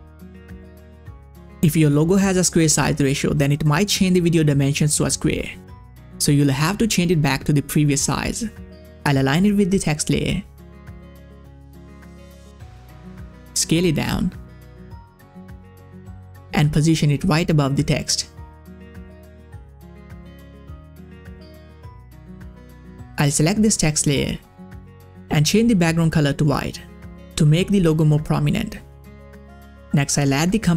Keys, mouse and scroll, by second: 5.5-8.5 drag, 9.4-16.2 drag, 16.3-19.7 drag, 19.7-22.5 drag, 23.4 click, 24.8 click, 25.7 scroll down 1, 26.3 click, 29.9 click.